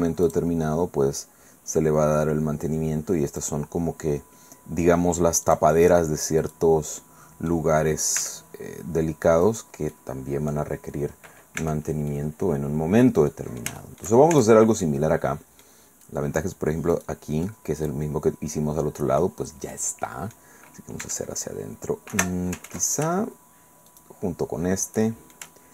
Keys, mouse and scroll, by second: 0.2 click, 3.3 click, 5.4 click, 6.4 right click, 7.0-8.1 middle drag, 8.2 e, 9.4 click, 9.9 click, 10.7-11.6 scroll down 1, 11.6 Tab, 12.1 click, 12.6 middle click, 13.3-14.5 middle drag, 14.3 shift+Tab, 14.8-15.8 shift+middle drag, 16.9 right click, 17.4-19.6 middle drag, 19.7-20.9 middle drag, 21.0 e, 22.1 Escape, 22.8 ctrl+z, 23.9 shift+right click, 25.0 shift+middle click.